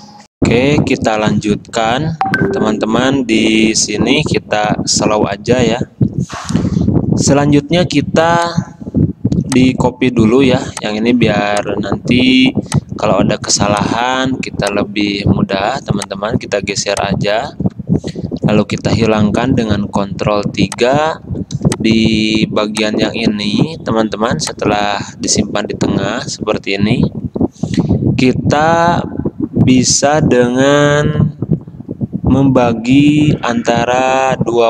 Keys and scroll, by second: 8.3 space, 19.9 ctrl+3, 21.7 space.